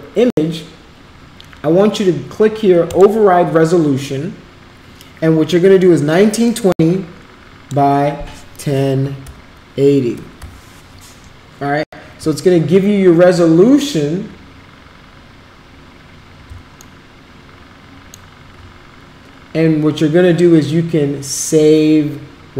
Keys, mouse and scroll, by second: 6.6-7.9 drag, 8.8-10.9 typing, 11.4 drag, 16.8-18.1 alt+middle drag.